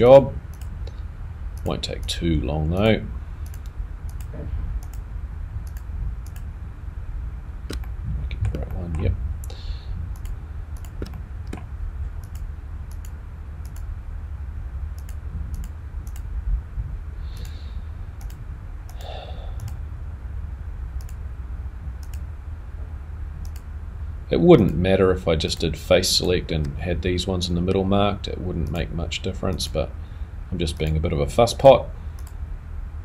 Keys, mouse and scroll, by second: 3.5 shift+click, 4.1 shift+click, 4.9 shift+click, 5.7 shift+click, 7.7 shift+click, 7.8 middle click, 8.7 shift+middle click, 11.0 shift+click, 11.2 middle click, 12.9 shift+click, 16.7 shift+click, 17.7 shift+click, 18.2 shift+click, 18.9 shift+click, 19.6 shift+click, 21.0 shift+click, 23.1-26.1 shift+click, 26.0 shift+click, 28.7 shift+click.